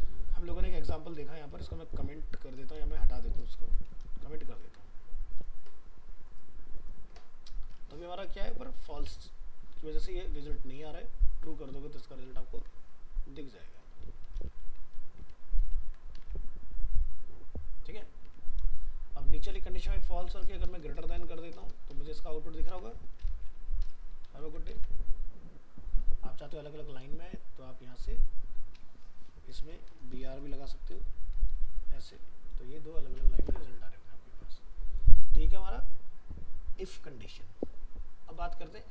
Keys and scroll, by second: 4.6 ctrl+s, 8.9 alt+Tab, 12.2 ctrl+z, 15.7 ctrl+s, 16.2 alt+Tab, 22.8 ctrl+shift+Left, 24.4 ctrl+s, 24.8 alt+Tab, 31.8 ctrl+s, 32.2 alt+Tab.